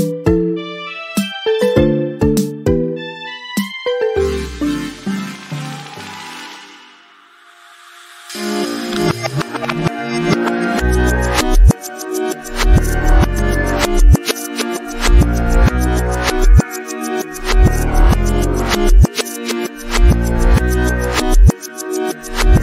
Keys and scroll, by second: 0.8 2, 1.1 Return, 3.1 ctrl+t, 18.5 ctrl+t.